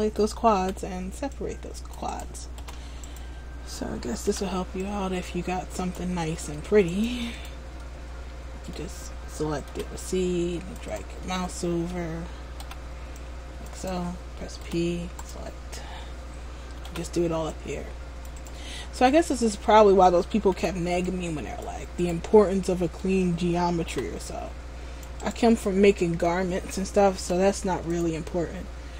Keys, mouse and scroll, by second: 0.7 c, 2.4 right click, 2.8 p, 4.4 c, 7.6 right click, 7.9 middle click, 9.8 c, 11.1 right click, 11.3 middle click, 12.8 c, 14.0 right click, 14.8 p, 17.0 c, 18.8 middle click, 22.3 right click, 22.5 middle click, 24.1 c, 25.5 right click, 25.7 middle click, 27.4 p.